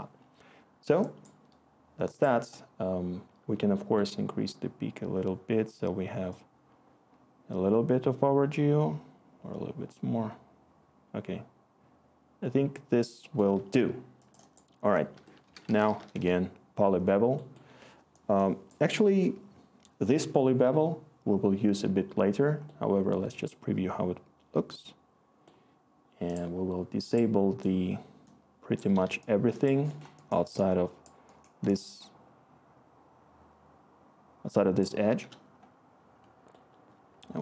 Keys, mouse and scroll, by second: 0.7 click, 15.1 Tab, 15.2-16.3 typing, 33.0-34.6 click, 33.0 click, 33.1 click, 34.8-37.4 scroll.